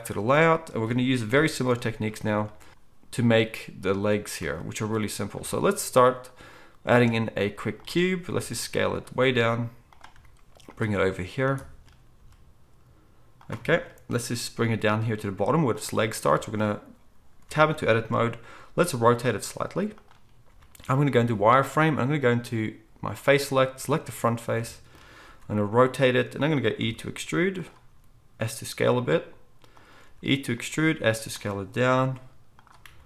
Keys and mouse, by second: 1.3 KP_1, 6.9 shift+a, 8.3 s, 9.2 s, 10.1 g, 12.2 s, 14.2 g, 17.4 Tab, 18.7 r, 21.7 z, 23.6 click, 23.6 middle click, 25.2 r, 26.8 e, 27.9 s, 30.0 e, 30.7 s, 31.9 g, 32.8 r.